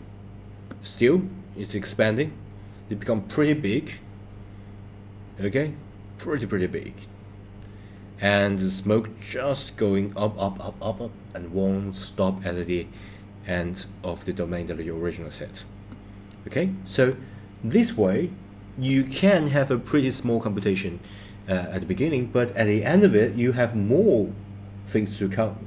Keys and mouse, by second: 16.6 click.